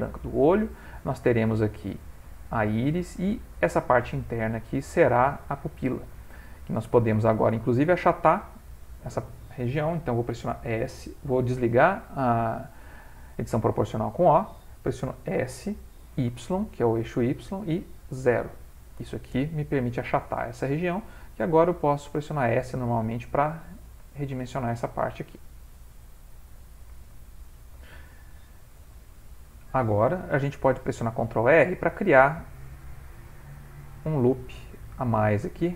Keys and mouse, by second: 0.5 middle click, 2.6 middle click, 3.5 middle click, 4.1 ctrl+middle click, 4.8 middle click, 5.6-6.0 ctrl+middle click, 6.7 middle click, 8.1 middle click, 8.7 middle click, 12.5 o, 15.4 s, 20.4 middle click, 21.2 s, 23.6 middle click, 24.2 ctrl+middle click, 24.5 middle click, 27.2 middle click, 30.6 ctrl+r, 33.5 s.